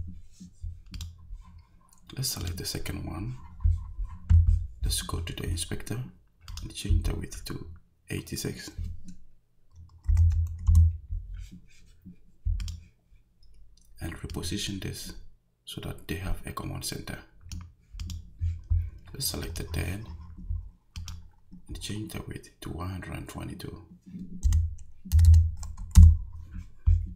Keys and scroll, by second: 9.8-10.7 typing, 24.4 1, 25.1 2, 26.0 Return.